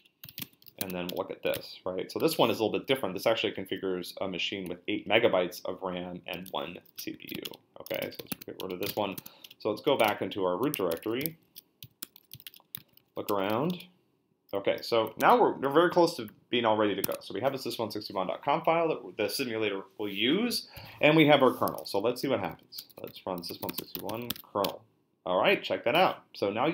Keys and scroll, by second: 0.0-1.5 typing, 2.7 Up, 2.9 Down, 4.8 Right, 6.9-14.0 typing, 12.5 Return, 15.2 super+Tab, 17.0 Tab, 22.0-24.8 typing.